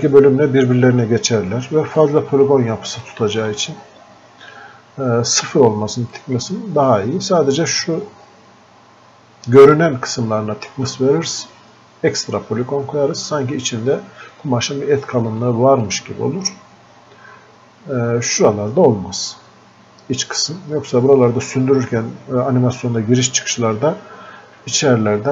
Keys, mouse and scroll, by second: 2.0 click, 3.1-6.1 alt+drag, 6.2-15.5 drag, 15.5-18.3 drag.